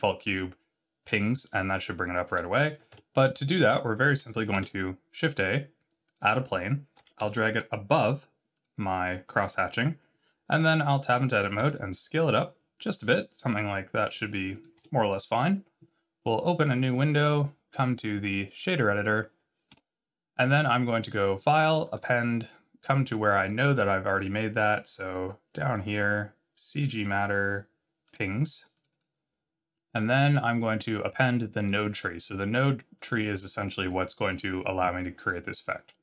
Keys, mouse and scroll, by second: 4.5 shift+a, 6.9 g, 10.5 Tab, 11.6 s, 14.7 Tab, 16.4 click.